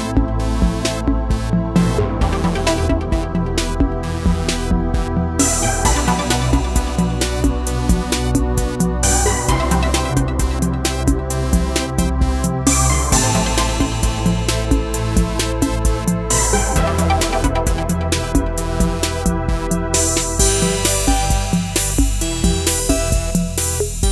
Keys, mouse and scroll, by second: 2.1 ctrl+v, 3.7-15.2 drag, 15.2-18.7 drag, 22.7 scroll down 1.